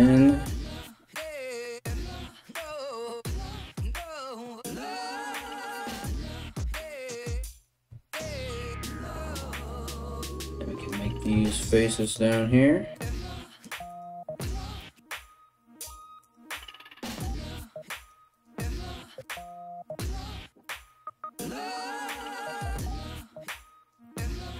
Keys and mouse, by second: 0.3 g, 1.4 right click, 1.6 g, 2.4 right click, 2.6 g, 3.7 right click, 3.9 g, 4.5 right click, 4.7 g, 5.9 right click, 6.1 g, 7.7-17.2 drag, 13.4 right click, 14.0 shift+middle click, 14.0 shift+right click, 14.7 f, 15.8 middle click, 15.8 right click, 16.5 g, 17.2 middle click, 17.5 right click, 17.6 middle click, 17.7 g, 18.3 right click, 18.4-19.4 middle drag, 18.5 g, 19.4 right click, 19.6-22.8 middle drag, 19.6 g, 22.8-24.5 ctrl+drag.